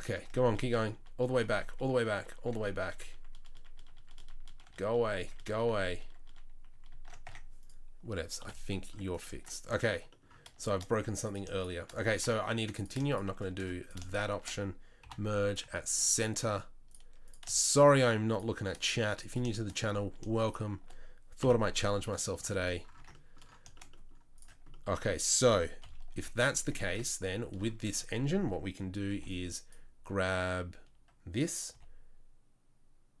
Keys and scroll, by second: 0.1 ctrl+z, 0.3 ctrl+z, 0.5 ctrl+z, 0.7 ctrl+z, 0.9 ctrl+z, 1.2 ctrl+z, 1.4 ctrl+z, 1.6 ctrl+z, 1.8 ctrl+z, 2.0 ctrl+z, 2.1 ctrl+z, 2.4 ctrl+z, 2.7 ctrl+z, 2.9 ctrl+z, 3.1 ctrl+z, 3.3 ctrl+z, 3.5 ctrl+z, 3.8 ctrl+z, 3.9 ctrl+z, 4.2 ctrl+z, 4.5 ctrl+z, 4.7 ctrl+z, 4.9 ctrl+z, 5.2 ctrl+z, 5.4 ctrl+z, 5.6 ctrl+z, 5.8 ctrl+z, 6.0 ctrl+z, 6.2 ctrl+z, 6.5 ctrl+z, 6.7 ctrl+z, 6.9 ctrl+z, 7.2 Tab, 8.4 Delete, 9.3 Tab, 12.0 2, 12.5 1, 15.0 m, 18.9 z, 21.4 m, 22.3 z, 23.0 Tab, 25.8 KP_3, 26.1 z, 26.9 Tab, 29.1 b, 31.7 g.